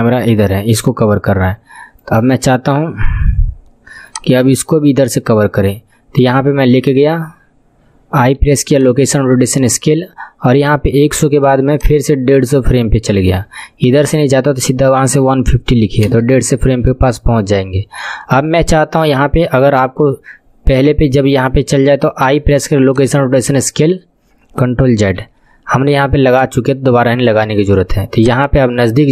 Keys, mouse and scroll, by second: 2.8-3.5 scroll down 5, 3.5 scroll down 3, 4.1-7.0 drag, 7.0 scroll down 4, 8.2 i, 11.8-20.2 drag, 22.3 i, 25.2 ctrl+z, 28.2-29.1 drag.